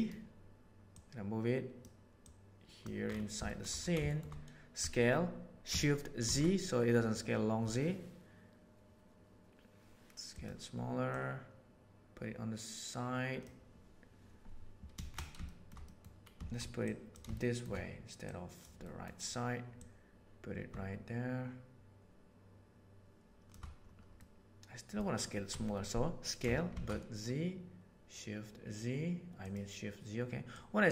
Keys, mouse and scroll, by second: 1.0 middle click, 2.2 middle click, 3.5 shift+middle click, 4.0 shift+middle drag, 4.8 s, 11.2-13.4 right drag, 15.4 shift+middle drag, 15.8 middle click, 16.8 click, 17.3 shift+middle drag, 18.2 click, 18.4 right click, 18.8 middle click, 19.8-20.9 drag, 20.9-22.6 shift+middle drag, 24.2 middle click, 25.5 s, 30.5-30.9 drag.